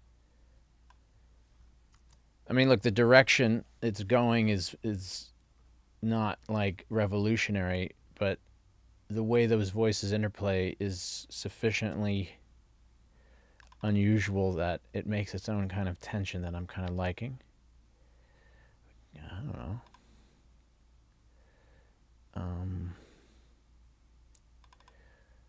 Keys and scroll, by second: 2.1 super+c, 11.9 super+c.